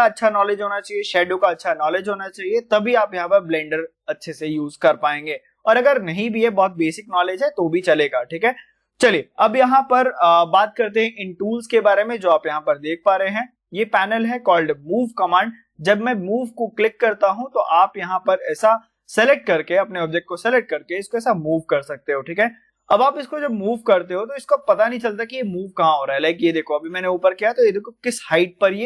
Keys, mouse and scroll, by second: 8.2 click, 15.0 click, 17.5-20.4 drag, 20.5 click, 20.5-24.1 drag, 24.1-25.9 middle drag, 25.9 click, 26.8-28.8 middle drag.